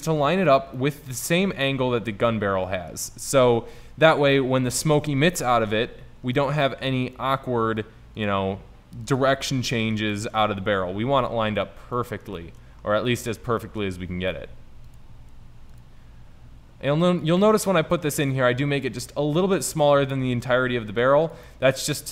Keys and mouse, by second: 1.5 s, 2.8-3.7 middle drag, 3.7 KP_7, 4.1 KP_5, 7.1 g, 8.6 s, 9.5-10.4 middle drag, 10.8 KP_5, 14.5 g, 15.3 s, 16.1 g, 20.5 g, 22.0 middle click.